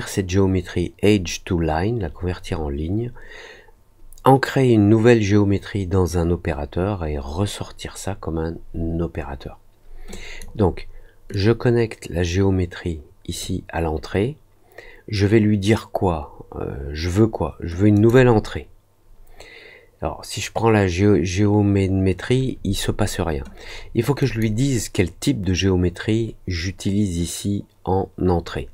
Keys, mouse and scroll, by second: 10.0 click, 11.2-13.3 drag, 17.9 click, 24.1 click.